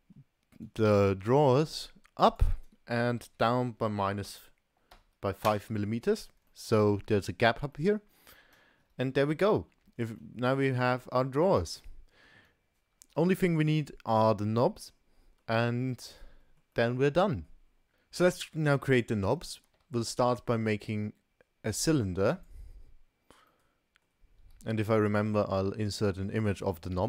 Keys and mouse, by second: 0.6 click, 0.7-1.1 middle drag, 1.6 g, 3.2 g, 6.5 middle drag, 6.7 click, 7.9 click, 8.0 middle click, 8.6 KP_0, 9.2 KP_0, 10.2 shift+middle click, 10.7-11.3 middle drag, 11.5 click, 11.9-12.4 middle drag, 12.9 ctrl+s, 14.9-15.4 middle drag, 16.1-16.7 middle drag, 16.8-17.5 middle drag, 18.4 shift+a, 19.8 shift+a, 23.5-24.2 middle drag, 24.6 s.